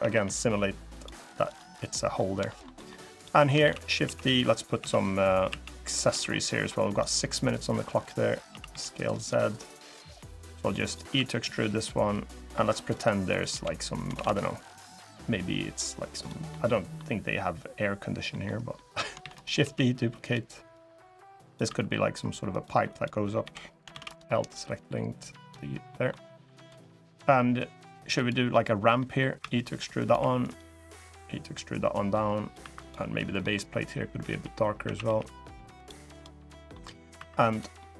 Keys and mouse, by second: 0.7 click, 1.2 click, 1.5 middle click, 2.2 shift+middle click, 2.5 middle click, 2.9 click, 3.4-5.8 typing, 3.5 click, 4.3 click, 6.6 click, 7.2 click, 8.2 s, 8.4 z, 8.9 click, 9.6-10.7 drag, 10.9 e, 11.8 click, 13.2 l, 13.9 shift+d, 14.4 click, 16.2 middle click, 18.0 middle click, 18.5 middle click, 18.9 shift+d, 19.3 s, 19.9 click, 20.5 click, 21.4 e, 22.2 click, 22.6 click, 23.2 l, 23.6 shift+d, 23.8-25.2 drag, 25.6 click, 28.7 click, 29.1 e, 29.7 click, 29.9 2, 30.1 click, 30.8-32.2 drag, 32.3 3, 32.6 click, 33.1 click, 34.0 g, 34.6 a, 34.8 g, 35.5 click, 35.9 click, 36.2 middle click, 36.9 3, 37.2 click, 37.5 middle click.